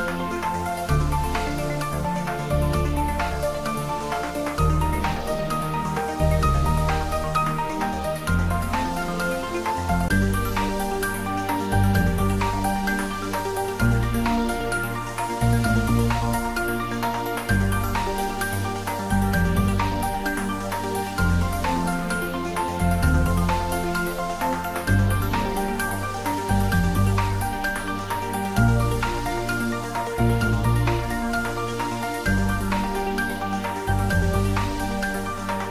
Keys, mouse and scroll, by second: 1.8 click, 2.4 ctrl+r, 2.8 click, 5.6 click, 6.4 ctrl+r, 6.8 click, 9.4 ctrl+r, 9.7 click, 12.0 Tab, 12.9 click, 13.7-14.2 scroll down 1, 14.2-17.9 middle drag, 17.9-18.3 scroll down 1, 18.3 middle click, 19.4 click, 21.0-21.5 scroll up 1, 22.2-23.7 typing, 25.8 click, 26.3-27.2 typing, 27.7 Right, 30.0 click, 30.4 scroll down 1, 30.7-33.2 middle drag, 33.2 click.